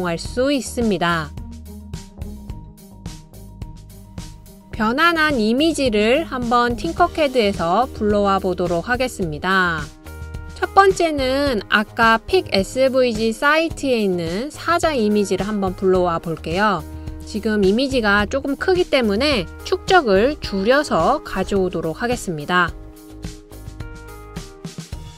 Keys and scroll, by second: 19.5-20.8 typing, 22.1-22.8 typing.